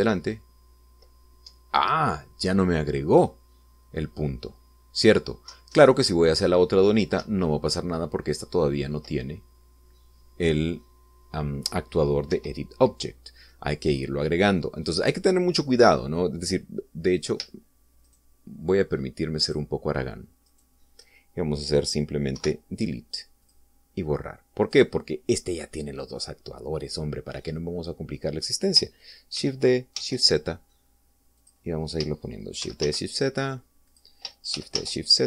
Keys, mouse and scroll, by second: 0.2 Up, 2.4 Down, 6.4 Left, 8.2 Up, 13.2 Escape, 18.0 right click, 19.0 shift+right click, 20.3 shift+right click, 21.4 shift+right click, 23.3 Delete, 24.4 click, 25.6 right click, 30.2 shift+d, 30.9 shift+z, 32.3 click, 33.6 shift+d, 33.8 shift+z, 34.8 click.